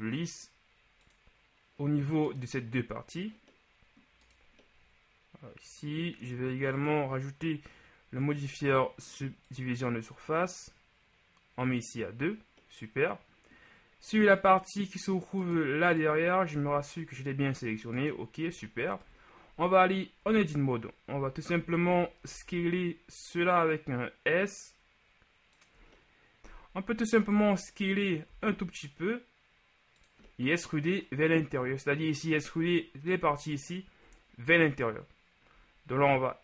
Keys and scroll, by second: 16.8 g, 19.2 KP_1, 20.3 Tab, 21.9 a, 22.4 s, 27.5 KP_1, 28.3 s.